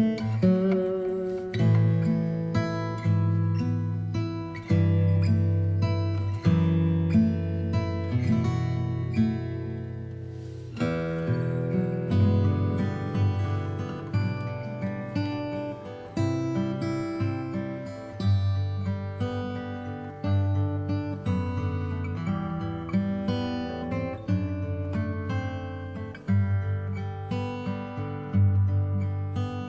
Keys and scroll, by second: 22.5 space.